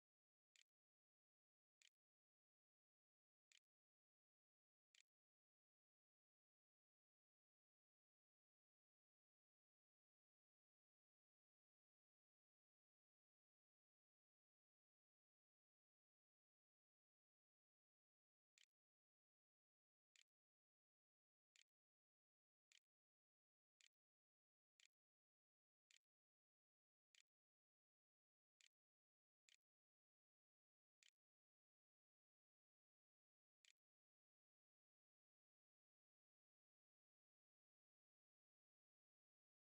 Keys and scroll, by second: 0.0-6.0 typing, 15.0-16.1 typing, 18.4 v, 20.0 e, 21.3 Tab, 21.4-28.0 typing, 28.4 Tab, 29.4-30.8 typing, 32.4-33.7 typing.